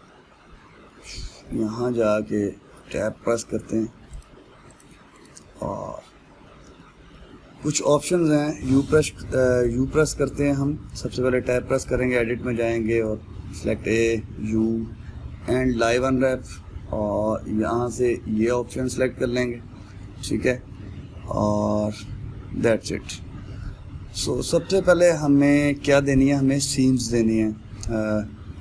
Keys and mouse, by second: 2.7 Tab, 3.8-4.8 middle drag, 4.8 click, 5.4 click, 6.2-10.3 middle drag, 10.3 click, 11.3 Tab, 12.5 click, 13.7 a, 21.4-28.0 middle drag.